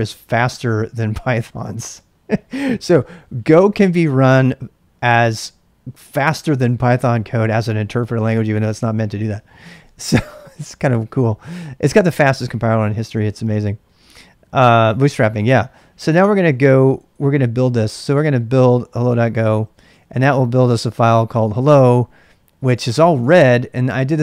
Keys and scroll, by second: 9.5-11.3 typing, 17.5-20.2 typing, 19.0 Return, 21.5-23.1 typing.